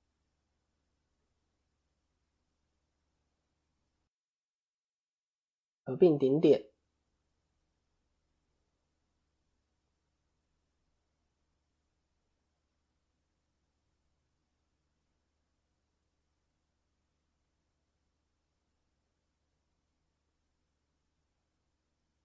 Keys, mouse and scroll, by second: 1.4 KP_1, 2.0-2.5 scroll down 5, 2.5 shift+middle click, 4.3 a, 5.0 alt+m, 6.7-7.0 scroll up 1, 7.4 shift+middle click, 8.0-8.3 scroll up 1, 8.3 click, 8.6 middle click, 9.3 scroll down 1, 9.5-10.9 scroll up 5, 10.1 shift+middle click, 10.9 middle click, 12.2 click, 13.0 KP_1, 14.0 scroll down 4, 14.4 shift+middle click, 15.7 g, 19.1 click, 19.5 middle click, 20.2 KP_3, 21.9 ctrl+KP_3.